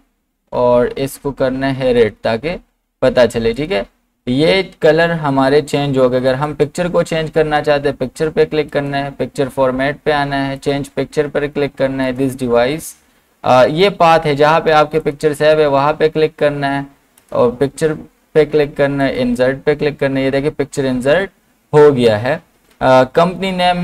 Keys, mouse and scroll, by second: 2.0 click, 6.3 click, 8.7 click, 15.0 click, 15.0 click, 21.2 scroll down 1.